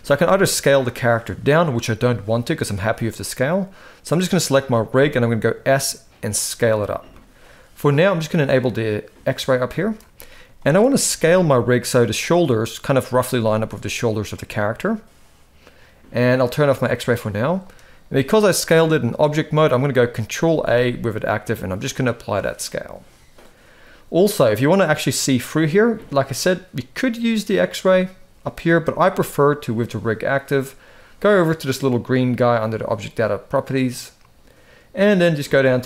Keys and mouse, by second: 4.0 click, 4.6 s, 9.0 click, 9.5 shift+middle drag, 10.3 shift+middle drag, 10.8 s, 13.0 s, 16.8 click, 17.3-17.6 shift+middle drag, 20.2 ctrl+a, 27.0 click.